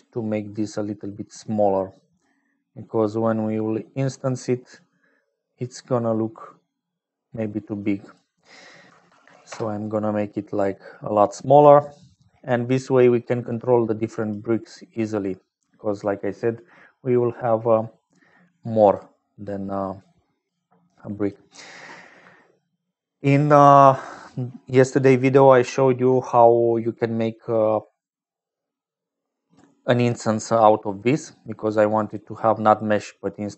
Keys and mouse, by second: 0.0-33.5 typing, 7.9-10.2 drag, 10.9 click, 12.8 click, 13.7 click, 14.9 click, 15.7 click, 18.7 click, 19.9 click, 20.7 click, 26.9 middle click, 28.6-29.7 middle drag.